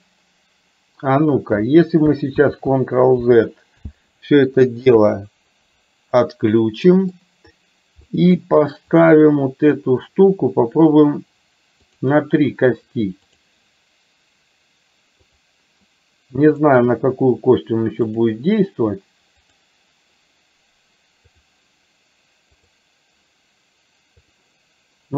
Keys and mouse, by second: 2.7 ctrl+z, 5.0 KP_3, 6.2-7.2 middle drag, 8.1 middle click, 9.1 click, 13.4 click, 16.6 click, 18.1 click, 22.6 click, 24.4 click.